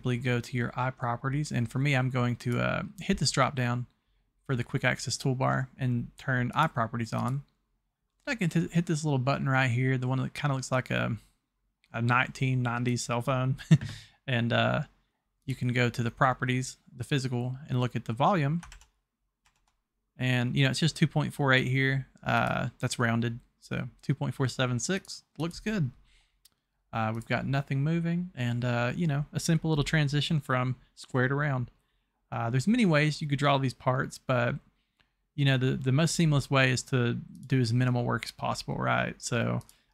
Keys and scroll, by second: 18.8 alt+Tab, 19.4 Tab.